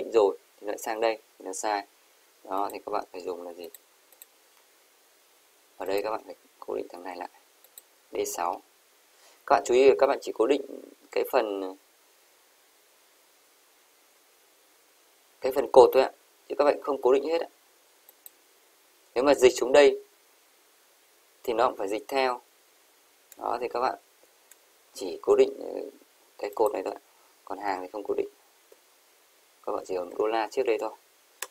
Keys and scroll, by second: 29.9 shift+4.